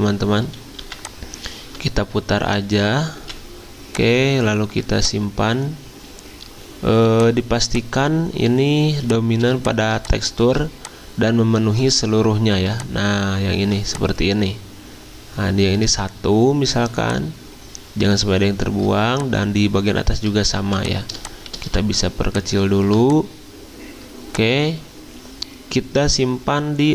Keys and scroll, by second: 0.8 r, 3.2 v, 8.8 z, 10.4 z, 20.6 z, 21.6 z.